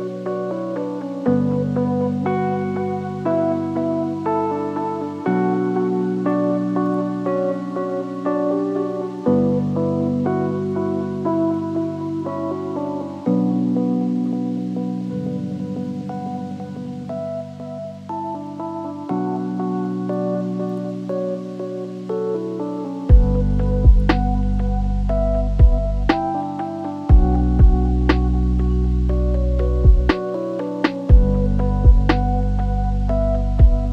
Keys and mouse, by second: 0.0 r, 7.3 click, 15.2 ctrl+z, 15.5 click, 18.1 click, 18.7 shift+d, 20.9 s, 22.5 g, 23.5 s, 27.1 shift+d, 32.3 click, 32.9 middle click, 33.5 shift+middle click.